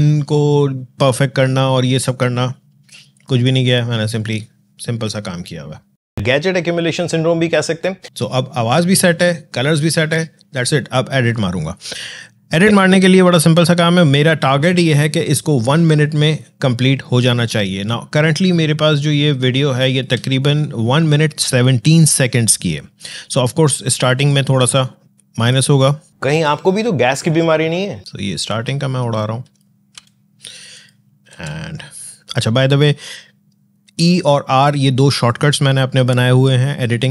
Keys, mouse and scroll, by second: 9.7 space, 12.4-18.8 drag, 18.8 click, 22.8-26.1 drag, 26.1 space, 27.9 alt+scroll up 1, 28.0-29.8 drag, 29.8 e, 30.6 click, 31.2 r.